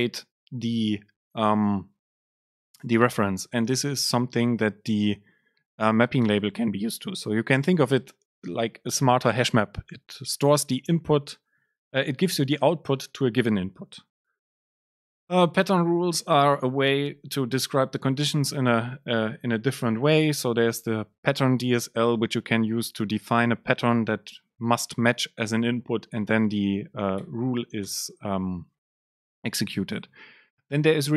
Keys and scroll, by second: 17.1 Return, 27.3 BackSpace, 29.3 Down, 29.8 Up.